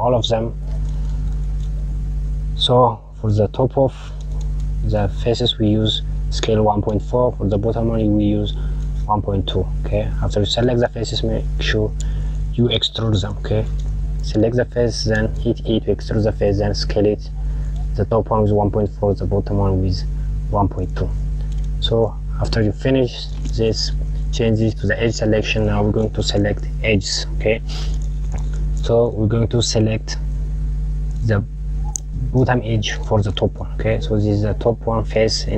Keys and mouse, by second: 2.6 click, 9.3 click, 11.7 click, 20.4 click, 22.8 click, 25.0 click, 26.0 KP_Add, 27.6 click, 30.2 click, 32.5-34.9 drag.